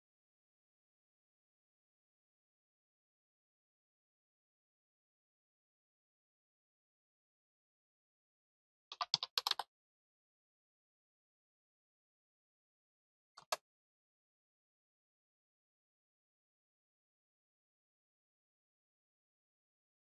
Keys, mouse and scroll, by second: 0.0 middle click, 0.9 scroll up 1, 1.2-2.5 middle drag, 3.3 click, 7.8 click, 18.4 click, 19.8 click.